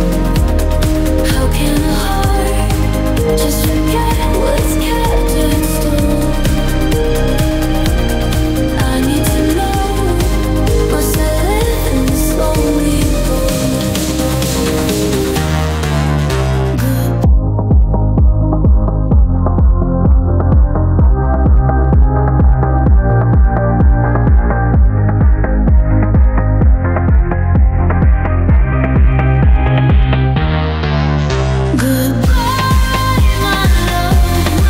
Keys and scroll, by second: 1.9 i, 6.4 ctrl+d, 9.8 ctrl+z, 13.5 space, 21.3 space, 26.5 space.